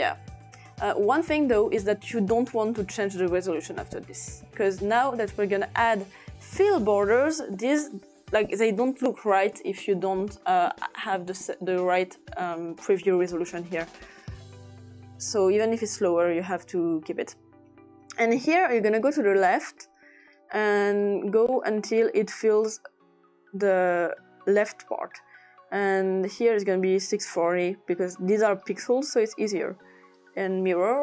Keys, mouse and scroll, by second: 3.6 click, 4.9 click, 5.7 click, 6.2-7.6 typing, 8.3 click, 10.1 click, 14.7 click, 19.1 click, 19.7 click, 20.3 click, 20.9 click, 21.5 click, 26.0 click, 26.8-27.6 typing, 28.5 click, 30.3 click.